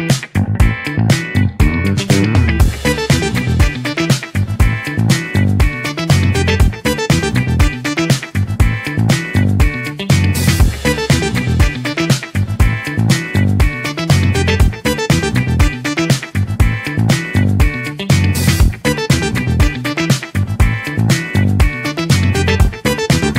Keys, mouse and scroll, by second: 8.7-11.3 right drag, 11.3-13.7 drag, 15.9 click, 16.5-18.5 right drag, 18.5-19.9 drag, 20.5-21.3 right drag, 21.5 click.